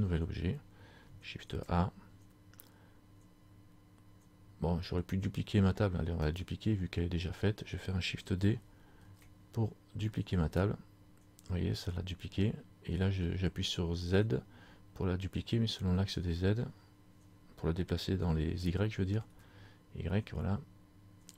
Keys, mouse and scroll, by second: 1.5 shift+a, 6.3 right click, 9.2 shift+d.